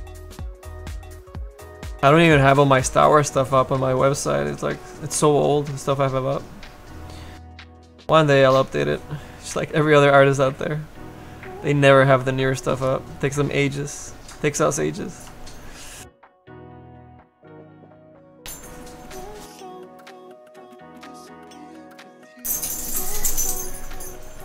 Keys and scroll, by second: 15.3 s, 17.0 s.